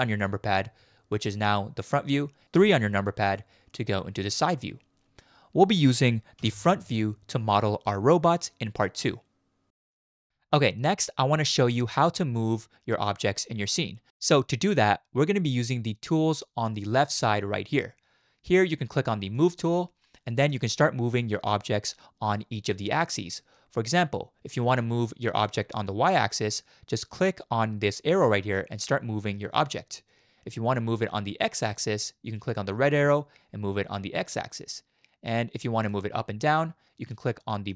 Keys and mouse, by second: 2.5 KP_3, 6.4 KP_1, 9.9-10.8 middle drag, 11.8 shift+middle click, 11.8 shift+click, 19.3 click, 21.9-23.6 middle drag, 24.7-25.4 middle drag, 28.2 click, 28.5-30.7 drag, 33.1-35.9 drag, 37.4 shift+drag, 37.6 shift+middle click.